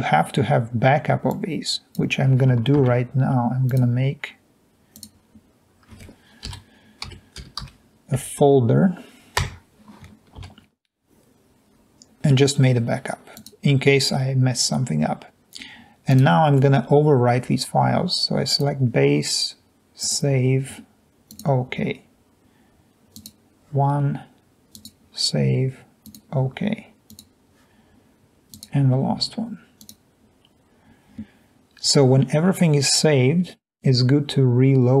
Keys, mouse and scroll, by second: 7.0-8.2 typing, 8.3 Return, 9.6 Return, 10.4 ctrl+v, 21.3 click, 26.0 click, 29.8 click.